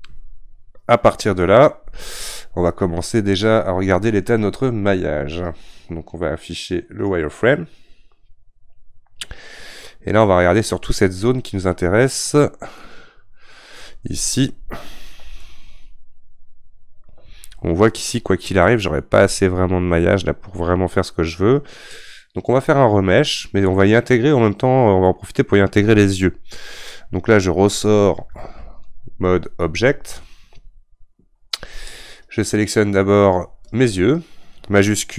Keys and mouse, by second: 7.0-12.8 drag, 12.8-30.2 middle drag, 30.2 ctrl+Tab, 32.2 click, 33.7 click.